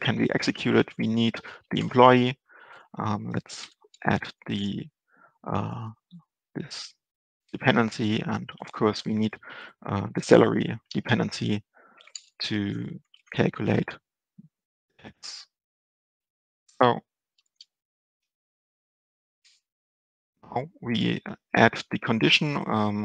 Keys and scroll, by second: 0.6 ctrl+space, 6.0 End, 7.5 Return, 8.6 ctrl+Right, 10.9 Right, 11.0 ctrl+space, 12.5 ctrl+Left, 13.6 Left, 17.9 Down, 18.0 ctrl+space.